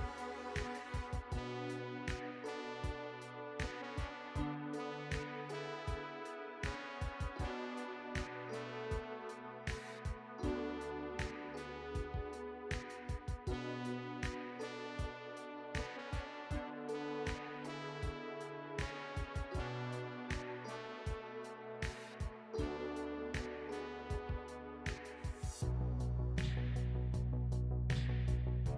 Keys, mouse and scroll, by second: 0.3 g, 0.9 middle click, 1.2 g, 1.5 middle click, 2.9 alt+z, 3.0 middle click, 3.5 click, 3.7 click, 4.1 click, 4.2 shift+click, 4.2 shift+click, 4.3 shift+click, 4.4 shift+click, 4.6 shift+click, 4.7 shift+click, 4.8 middle click, 5.9 shift+click, 6.0 shift+click, 6.2 middle click, 6.5-6.9 shift+click, 6.7 shift+click, 6.7 shift+click, 6.8 shift+click, 7.0 middle click, 7.9 alt+e, 8.8 middle click, 9.2 g, 9.6 middle click, 9.8 middle click, 10.0 click, 10.1 shift+click, 10.1 shift+click, 10.2 shift+click, 10.3 shift+click, 10.5 r, 11.1 middle click, 11.5 click, 11.6 shift+click, 11.7 shift+click, 11.8 shift+click, 11.8 shift+click, 12.0 shift+click, 12.1 r, 13.0 middle click, 13.6 2, 13.7 click, 13.7 middle click, 14.0 shift+click, 14.0 middle click, 14.1 g, 14.5 middle click, 14.9 click, 15.0 middle click, 15.3 shift+click, 15.5 middle click, 15.8 g, 16.6 middle click, 18.1 click, 18.2 middle click, 18.4 scroll down 2, 18.5 middle click, 19.0 alt+click, 19.5 middle click, 19.6-20.2 scroll up 3, 19.7 middle click, 20.3 middle click, 20.6 alt+z, 20.9 ctrl+click, 21.1 ctrl+click, 21.5 ctrl+click, 21.9 middle click, 22.1 ctrl+click, 22.4 ctrl+click, 22.6 ctrl+click, 22.9 ctrl+z, 23.1 middle click, 23.5 shift+click, 24.0 middle click, 24.4 s, 24.8 g, 25.0 middle click, 25.4 middle click, 25.6 click, 25.7 alt+z, 26.0 middle click, 26.0 scroll down 2, 26.2 middle click, 26.4 Tab, 26.6 middle click, 27.5 Tab, 27.8 a, 28.0 alt+n.